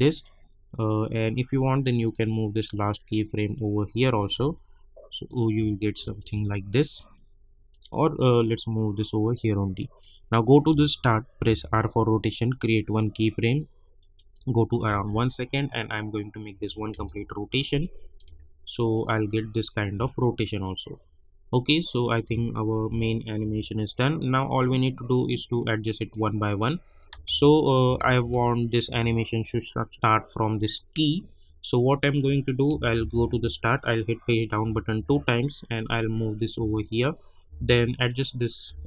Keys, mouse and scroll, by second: 0.1-4.3 drag, 4.3 space, 7.7-11.4 drag, 11.4 r, 12.5 click, 16.9 Return, 17.8 click, 18.2 space, 20.6 scroll down 1, 22.1 click, 22.8 u, 23.4 u, 23.8-25.8 scroll down 1, 26.1 click, 27.1 space, 29.6 click, 31.7 click, 32.7 =, 32.9 =, 33.2 =, 34.6 Page_Down, 35.7 click, 36.5 [, 37.4 Page_Down, 37.9 click, 38.6 [.